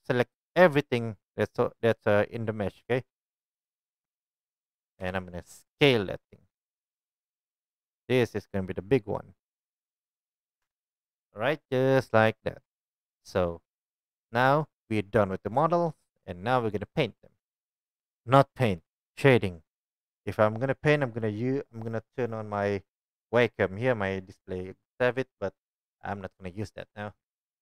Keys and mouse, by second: 5.0 KP_1, 6.5 s, 9.7 click, 10.2-11.2 drag, 10.6 Tab, 12.2-12.6 shift+right drag, 13.2 click, 15.7 shift+drag, 16.2 right drag, 16.4-27.6 drag.